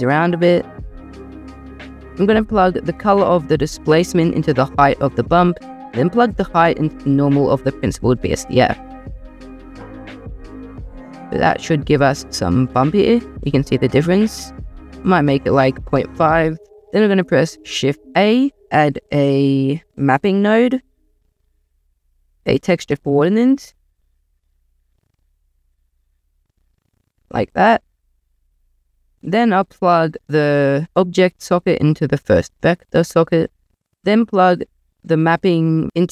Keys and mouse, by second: 1.2 click, 4.1 click, 5.8 drag, 12.0-15.3 drag, 15.4-16.6 drag, 17.6 shift+a, 20.2 p, 21.6 drag, 21.7 shift+a, 24.0 BackSpace, 27.1 click, 27.4 click, 31.2 click, 33.4 drag.